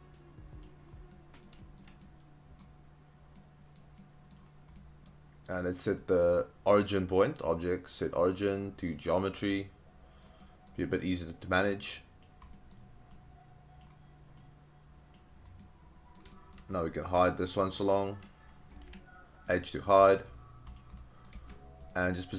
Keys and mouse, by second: 1.1-1.4 middle drag, 1.6 shift+middle drag, 2.0-2.6 middle drag, 3.4-3.8 middle drag, 4.0-4.3 middle drag, 4.8-5.1 middle drag, 6.0 middle drag, 7.6-9.1 drag, 9.6-10.3 middle drag, 10.4 middle click, 11.6-12.2 drag, 12.5 middle click, 13.2-13.9 drag, 14.4-15.1 drag, 15.6-16.2 middle drag, 16.3 shift+middle drag, 18.8 h, 19.5-19.8 middle drag, 21.0 middle drag, 21.9 middle click.